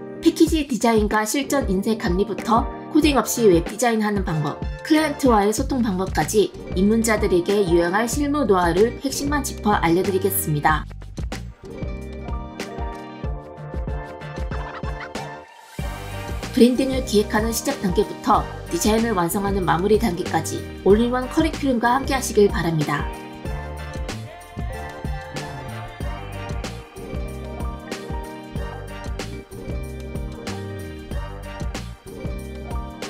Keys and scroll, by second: 0.0 space, 2.8 space, 8.9 space.